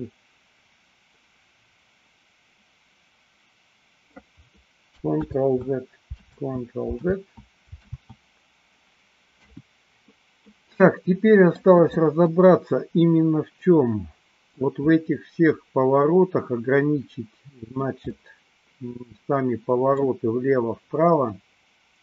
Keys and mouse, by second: 5.3 ctrl+z, 6.4 ctrl+z, 7.2 ctrl+z, 8.1 ctrl+z, 9.4 KP_1, 10.6-11.8 middle drag, 12.5-14.7 middle drag, 15.0-17.7 middle drag, 18.1-20.0 middle drag, 21.4-22.0 middle drag.